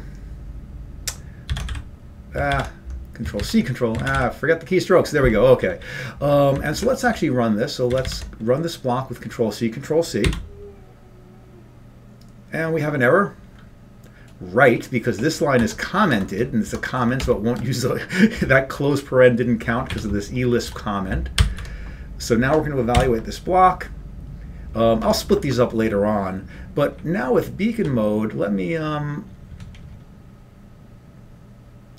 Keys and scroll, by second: 2.0 ctrl+x, 2.0 ', 8.1 ctrl+c, 8.1 ctrl+p, 8.1 ctrl+n, 8.1 ', 10.5 y, 16.1 Return, 16.1 BackSpace, 16.7 Tab, 18.0 ), 23.3 Up, 23.3 Down, 23.3 ctrl+c, 23.3 y.